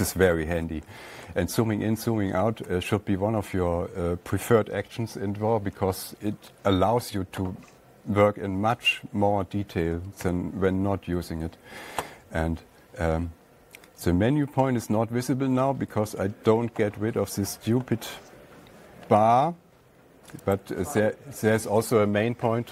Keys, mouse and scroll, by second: 0.4-1.3 scroll down 4, 1.3 ctrl+scroll down 1, 1.4-2.6 scroll, 10.7 *, 21.0-22.7 drag.